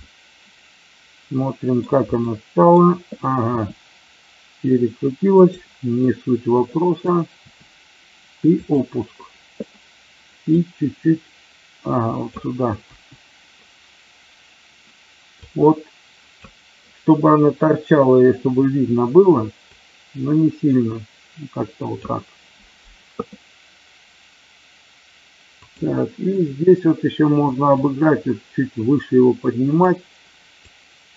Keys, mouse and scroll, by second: 2.3 middle click, 5.9 middle click, 7.3 r, 8.6 click, 10.4-12.3 drag, 15.4 click, 19.7-22.1 drag, 27.7-29.8 drag, 30.7-31.1 drag.